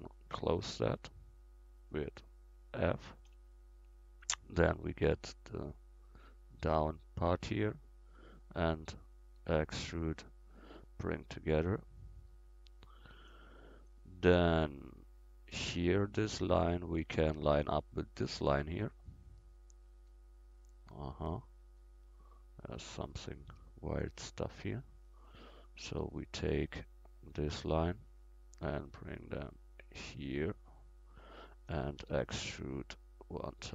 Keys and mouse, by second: 0.1-1.4 middle drag, 1.4-3.1 drag, 3.3 f, 4.4 click, 4.9 right click, 5.4 right click, 5.6-9.4 right drag, 8.3 click, 8.3 middle click, 9.4 e, 11.3 middle click, 11.4 click, 12.8-14.1 drag, 14.9 click, 15.1 middle click, 15.4 click, 15.5 middle click, 20.7 click, 20.7 middle click, 20.7 right click, 21.3 middle click, 21.4-23.1 drag, 23.5 a, 25.3-26.8 right drag, 26.4 c, 26.8-28.5 drag, 28.8-30.6 drag, 32.0 e, 33.0-33.7 drag.